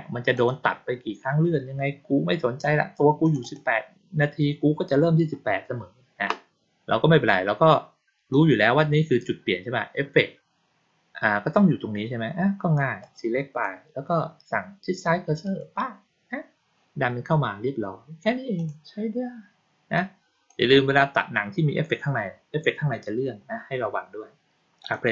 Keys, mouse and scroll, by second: 0.3 click, 3.1 click, 3.3 click, 8.2-8.5 drag, 12.9-13.5 drag, 15.3 click, 18.5 click, 19.9 click, 24.7 click.